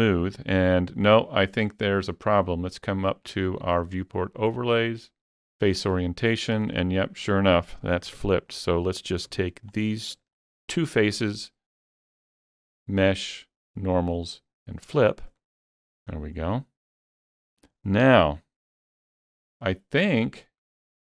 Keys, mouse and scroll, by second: 0.2 scroll down 2, 0.5-4.8 middle drag, 2.8 click, 5.9 click, 8.2 Tab, 8.5 middle click, 9.3 3, 9.7 click, 12.8 shift+click, 14.8 shift+click, 15.9 alt+a, 16.1 scroll down 2, 16.5-21.0 middle drag, 18.1 Tab, 20.6 click.